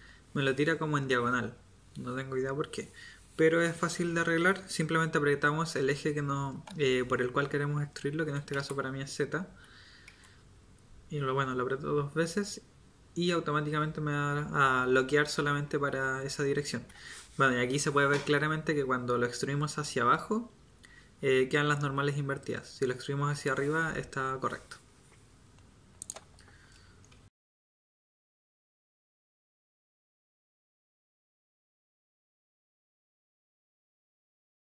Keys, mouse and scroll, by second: 27.2-34.8 typing, 27.9 Tab, 28.0 Tab, 32.0 Tab, 34.0 Tab.